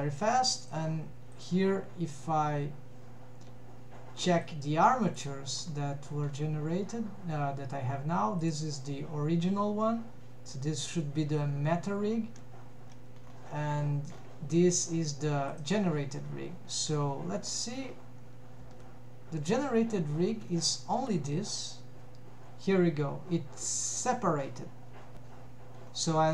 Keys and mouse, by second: 0.7 click, 1.4 click, 4.6 click, 18.7 g, 22.0 Escape.